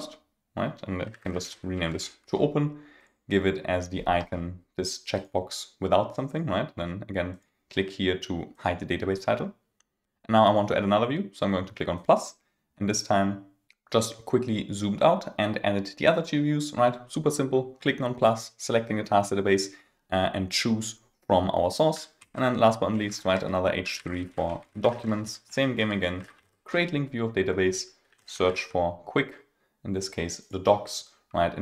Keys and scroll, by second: 1.1 super+a, 23.3 Return, 25.0 Return, 27.0 Return.